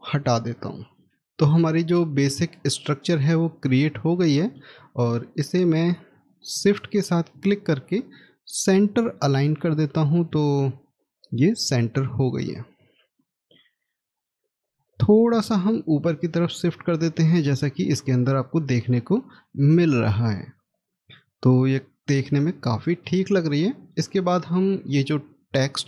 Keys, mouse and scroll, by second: 0.4 scroll down 1, 1.1 middle click, 6.5 shift+click, 9.2 x, 13.0 middle click, 15.9 middle click, 16.8-17.2 scroll down 1, 18.7-19.2 scroll up 1, 21.5 scroll down 1, 23.5 middle click, 24.4-25.8 scroll down 1.